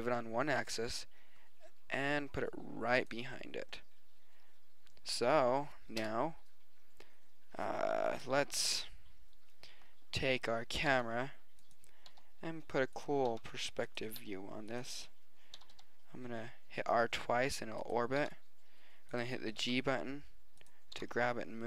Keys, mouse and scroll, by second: 6.0 KP_0, 10.4-10.8 right drag, 10.9 g, 12.1 r, 13.3 g, 14.2 r, 15.6 r, 18.2 g, 19.6 g, 21.0 g.